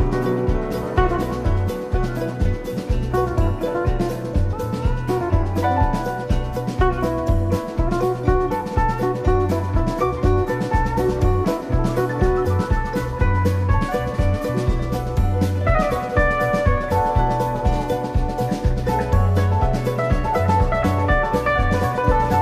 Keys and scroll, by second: 8.3 Down, 21.1 shift+Down, 21.8 Down.